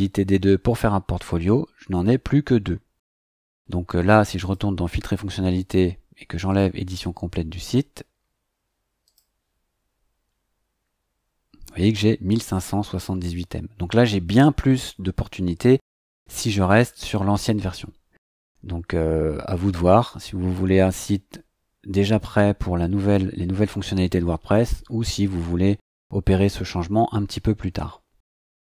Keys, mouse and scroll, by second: 4.4 click, 6.5 click, 9.0 click.